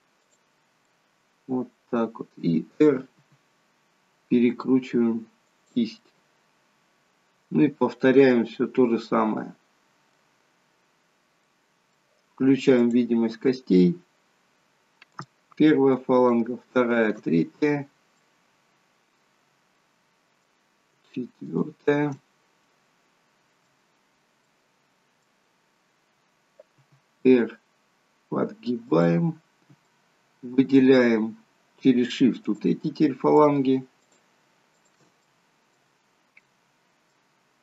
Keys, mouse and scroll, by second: 1.0 middle click, 3.3 r, 6.1 middle click, 11.6 middle click, 12.8 click, 13.8 scroll up 1, 15.2 click, 16.2 shift+click, 17.0 click, 17.4 scroll down 1, 18.3 middle click, 19.7 middle click, 21.6 shift+click, 22.2 middle click, 24.6 middle click, 25.7-26.3 scroll down 2, 26.9 r, 29.5 scroll up 3, 29.9 middle click, 33.5 shift+click, 34.1 shift+click, 34.9 shift+click, 35.4 middle click, 36.0 scroll down 2, 36.4 middle click.